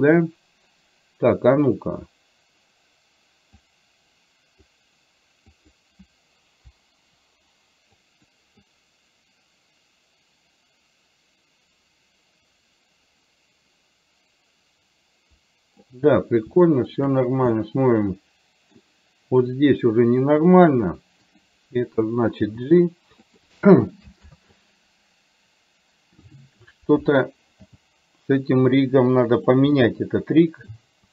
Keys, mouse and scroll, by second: 3.9-4.9 drag, 5.6 click, 6.9 Delete, 8.1 Delete, 8.1 click, 8.9-16.0 drag, 16.7 shift+middle click, 17.6-18.7 middle drag, 19.7-20.7 drag, 21.5 click, 22.6 g, 24.4 ctrl+z, 27.9 g, 29.9-30.9 middle drag.